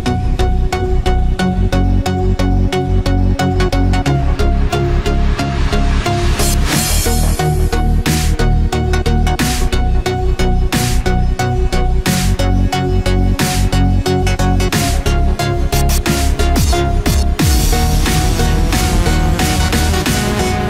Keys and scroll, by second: 1.0 ctrl+-, 3.4 ctrl+=, 8.8 ctrl+-, 10.5 ctrl+=, 12.6 ctrl+-, 13.0 ctrl+=, 17.9 ctrl+z.